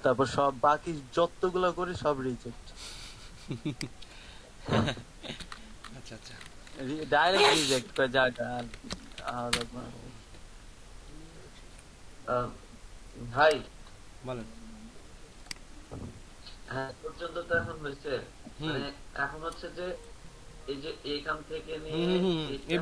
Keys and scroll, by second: 5.4 BackSpace, 5.7 BackSpace, 7.0-9.1 typing, 8.7 Caps_Lock, 9.5 Return.